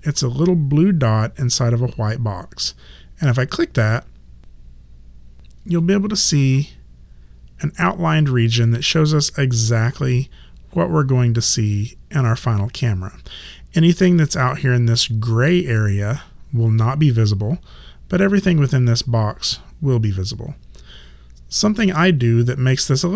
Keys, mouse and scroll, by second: 3.4 click, 5.8 click.